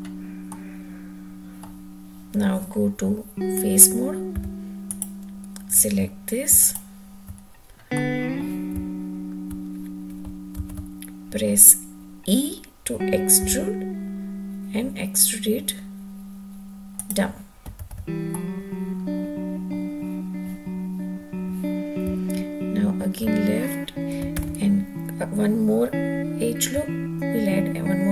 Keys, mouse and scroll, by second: 0.3-1.5 middle drag, 4.1 3, 4.7 click, 6.4 shift+click, 7.8 middle click, 8.7 `, 10.4 alt+z, 13.2 e, 16.8 click, 17.6 alt+z, 18.1-19.6 middle drag, 24.2 alt+z.